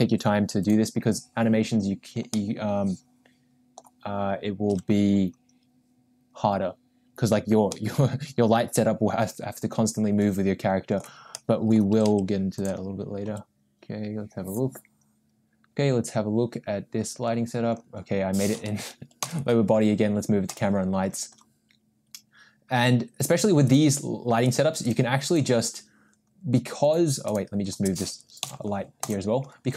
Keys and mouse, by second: 2.3-4.1 middle drag, 4.7 KP_0, 8.3-11.2 middle drag, 11.9 r, 13.9 g, 19.2 m, 23.6 click, 24.9 click, 25.3 click, 27.3 click, 29.2 m.